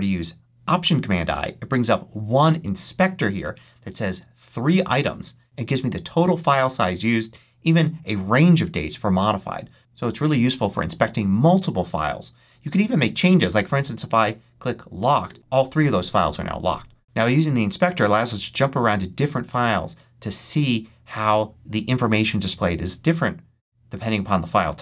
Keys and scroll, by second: 1.2 alt+super+i.